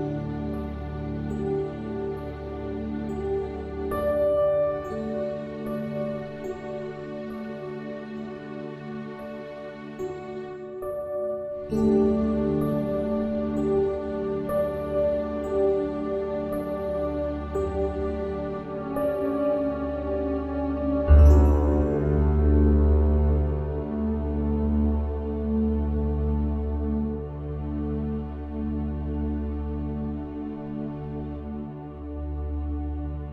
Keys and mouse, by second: 4.9 click, 5.5 click.